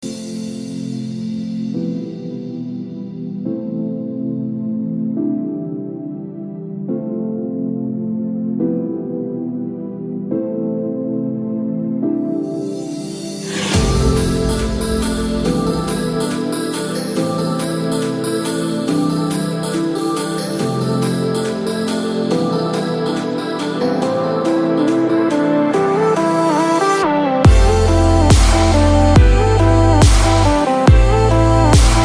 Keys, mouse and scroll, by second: 20.0 space, 21.2 click, 24.3 scroll down 1, 24.6 scroll up 1, 26.3 click, 28.1 click.